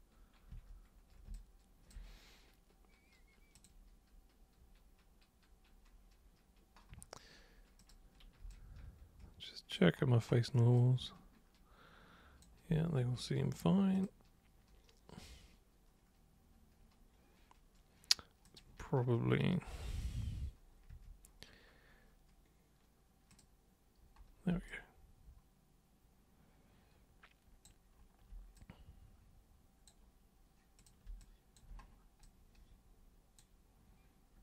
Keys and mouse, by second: 0.5 super+1, 1.3 alt+super+click, 3.5 super+click, 7.8 super+click, 8.5-9.7 alt+super+drag, 10.8-12.4 alt+super+drag, 13.9 super+click, 18.4 super+click, 19.9 super+3, 20.9 super+1, 23.3 super+click, 24.7-27.7 alt+super+drag, 28.5-29.9 super+drag, 30.8 super+click, 31.2 alt+super+click, 32.2-33.4 super+drag.